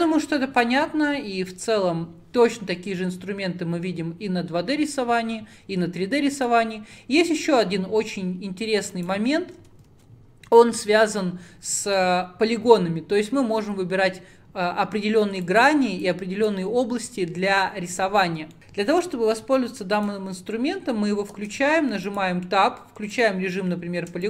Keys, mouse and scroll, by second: 6.4 click, 7.3-8.7 middle drag, 8.7-9.0 scroll down 4, 9.0 click, 9.4-10.0 scroll up 1, 10.0 ctrl+z, 18.6 click, 20.0 click, 21.4 Tab, 22.2 click, 23.0 3, 23.3 click.